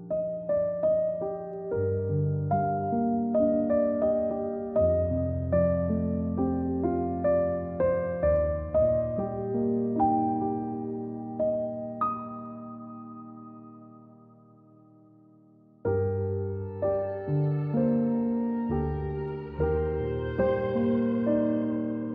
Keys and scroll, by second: 2.0 =, 3.0 z, 3.6 a, 9.4 z, 10.0-10.5 space, 11.7-13.6 typing, 17.5 v, 17.7 z, 18.5 space, 19.0 space.